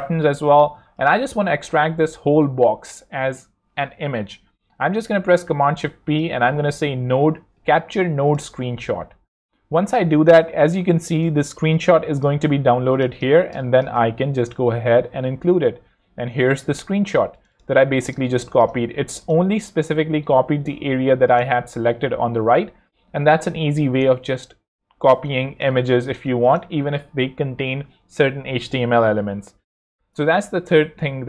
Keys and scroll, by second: 0.3 shift+super+c, 5.1 shift+super+p, 5.9 shift+super+n, 6.1-8.0 typing, 10.6 super+Tab, 12.8 z, 13.5 space, 17.2 shift+z, 18.1 space, 18.9 z, 20.1 super+Tab, 24.1 super+Tab, 25.0 super+x, 25.7 super+space.